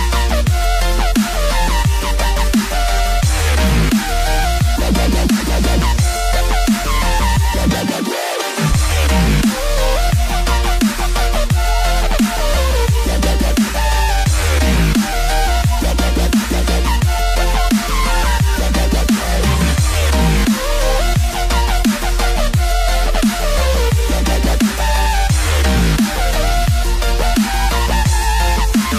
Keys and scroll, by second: 25.5 space, 26.3 space.